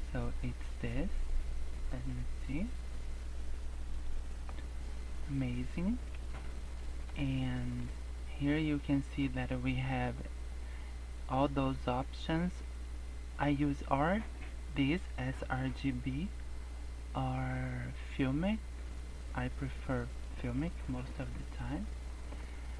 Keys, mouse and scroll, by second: 0.0-0.4 scroll up 2, 1.0 scroll down 2, 1.9 scroll up 1, 2.3 Tab, 2.5 scroll up 1, 3.6 scroll down 3, 3.9 scroll up 1, 4.2 Tab, 4.4 Tab, 4.5 scroll up 3, 5.3 Tab, 5.7 scroll down 1, 6.0 scroll up 1, 6.6 scroll down 2, 6.8 shift+middle click, 7.6 shift+middle click, 8.0-8.8 scroll up 6, 10.0 click, 19.3 scroll up 1, 20.2-20.9 scroll down 4, 20.9 scroll up 2, 22.4-22.7 scroll down 7.